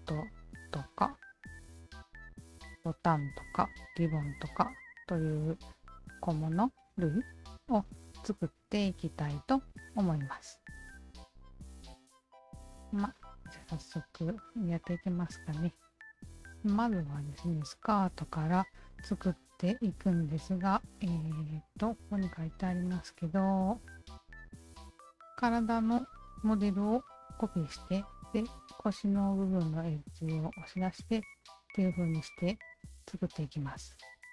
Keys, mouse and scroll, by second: 0.6 alt+click, 11.8 alt+click, 12.7-18.7 alt+drag, 19.9 alt+click, 22.6 alt+click, 23.2 alt+click, 24.1 alt+click.